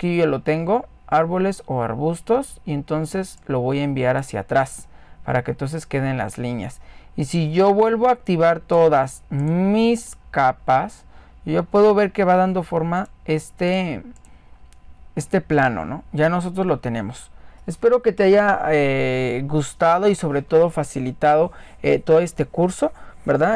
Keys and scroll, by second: 0.0-0.5 typing.